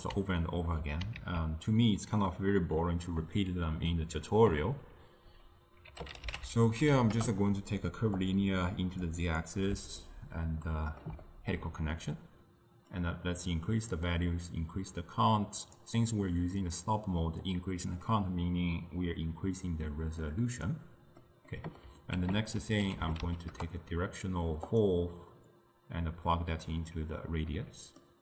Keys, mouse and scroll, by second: 9.3 click, 10.1-13.1 ctrl+middle drag, 13.1-23.6 drag, 23.6 ctrl+a, 27.0-28.2 drag.